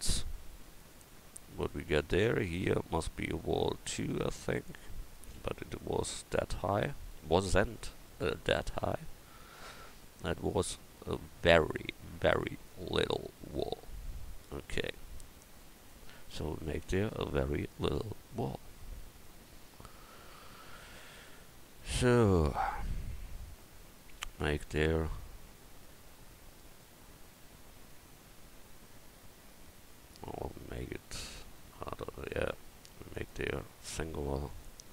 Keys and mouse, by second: 1.6 middle click, 5.6 KP_1, 20.5 Tab, 24.3 ctrl+r, 32.5 Tab.